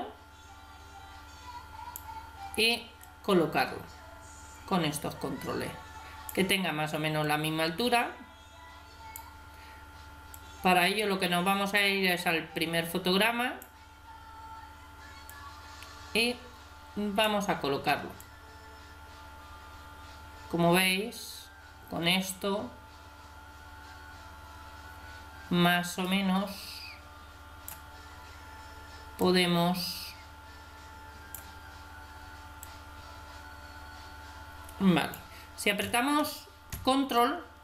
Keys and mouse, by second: 3.0-4.8 drag, 7.2-8.9 drag, 10.3-12.1 drag, 15.3-17.1 drag, 18.2-19.9 drag, 29.2-31.0 drag, 32.7-34.4 drag, 34.5-37.1 middle drag, 37.1-37.6 drag.